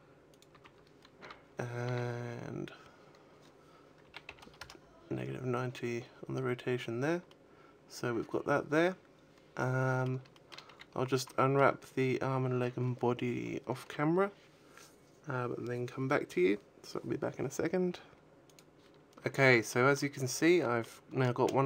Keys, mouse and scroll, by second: 0.3 click, 0.4 a, 1.1 a, 1.7 r, 6.0-6.9 scroll down 6, 7.1 middle click, 10.2 shift+middle click, 10.6 a, 10.8 scroll down 4, 11.2 shift+middle click, 19.2 middle click, 20.2 middle click.